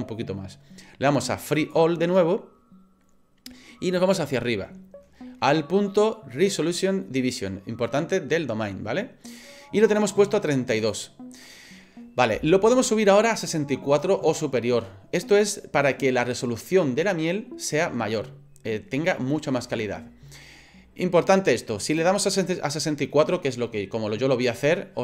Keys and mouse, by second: 1.6 click, 10.9-25.0 drag.